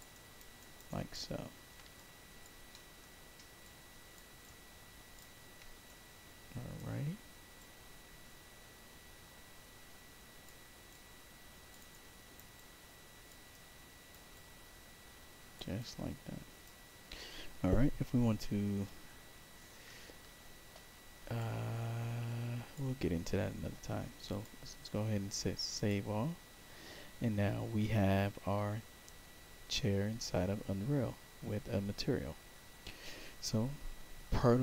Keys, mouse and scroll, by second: 0.0 alt+right click, 0.5 alt+right click, 0.8 alt+click, 1.9 alt+click, 2.6 alt+middle click, 3.5 alt+click, 4.3 alt+click, 4.4 alt+right click, 5.8 right click, 7.5-10.4 drag, 10.8 right click, 10.8 click, 11.8 right click, 12.5 click, 13.4 right click, 14.2-15.5 drag, 15.7 right click, 21.3-22.7 drag, 24.2 click, 25.7 click.